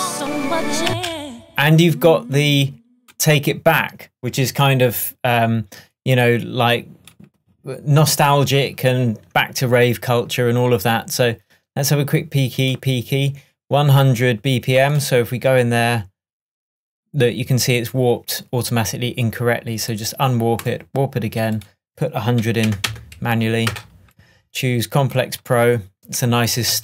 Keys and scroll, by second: 0.9 space, 22.2-23.2 typing, 23.7 Return.